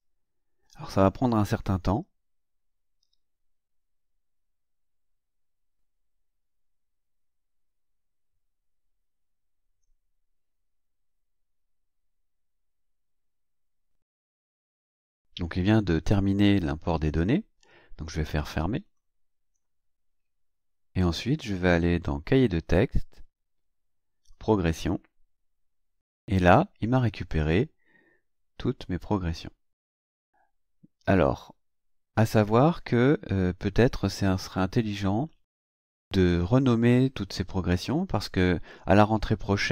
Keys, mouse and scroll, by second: 13.8 click, 18.9 click, 22.1 click, 24.3 click, 26.8 click.